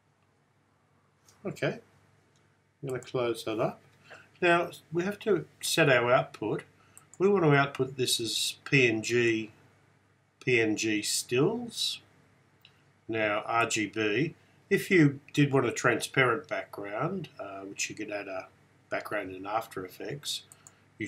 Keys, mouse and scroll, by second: 7.1 click, 13.7 click, 20.6-21.0 drag.